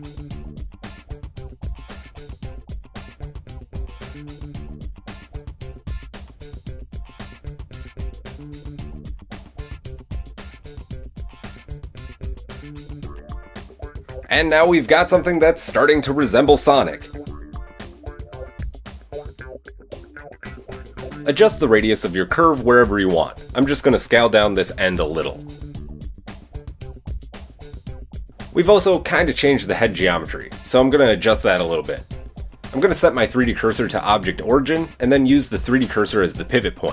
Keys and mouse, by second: 2.2 KP_1, 3.6 shift+click, 3.9 shift+click, 4.2 shift+click, 6.0 shift+click, 6.2 shift+click, 6.5 shift+middle click, 7.1 shift+click, 7.2 shift+middle click, 8.1 shift+click, 8.3 shift+middle click, 9.0 x, 14.1 Tab, 15.1-16.5 middle drag, 16.5 click, 16.7-18.0 middle drag, 17.9 KP_1, 18.0 Tab, 18.0 click, 18.3 middle click, 18.5 Tab, 20.5 click, 20.7 Tab, 21.1 shift+middle click, 21.7 click, 21.8-23.8 shift+middle drag, 23.0 alt+s, 23.8 click, 24.1-26.4 alt+middle drag, 24.3 alt+s, 26.1 Tab, 26.4-28.4 drag, 26.9 Tab, 28.5-36.7 drag, 33.7 shift+s, 35.6 typing, 36.7-36.9 middle drag.